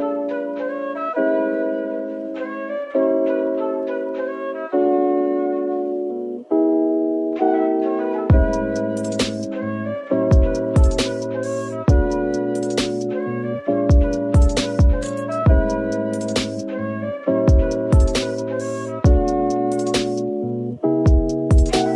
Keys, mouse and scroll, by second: 6.8 scroll up 1, 14.8 g, 16.0 right click, 17.1 scroll down 1.